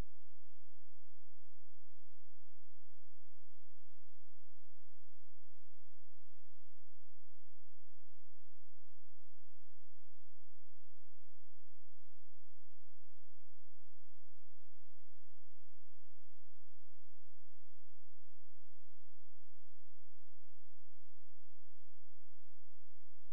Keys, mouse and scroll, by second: 4.6 ctrl+a, 6.4-9.7 typing, 10.0 ctrl+a, 11.9 click, 12.7 ctrl+space, 13.4 click, 15.9 shift+right click, 17.0-17.9 scroll up 1, 17.9 click, 19.7-21.0 scroll down 1, 21.0 click, 21.4-21.7 scroll down 1, 22.1-23.1 scroll up 1, 23.1 F4.